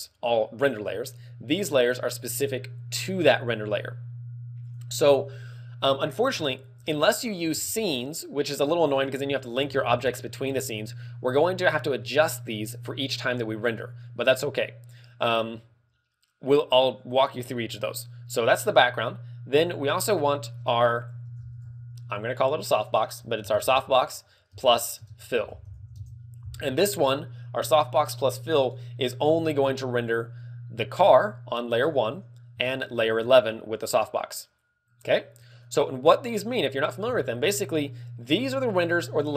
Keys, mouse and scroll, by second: 4.7 click, 5.8 scroll up 4, 6.4 shift+middle click, 6.9 scroll up 1, 7.5 ctrl+w, 9.6 z, 10.3 z, 10.3 shift+middle click, 10.8 shift+middle click, 10.8 z, 19.5 click, 19.8 click, 20.3 click, 30.1 click, 31.8 click, 32.8 shift+click, 33.2 shift+click, 33.8 click, 35.6 click.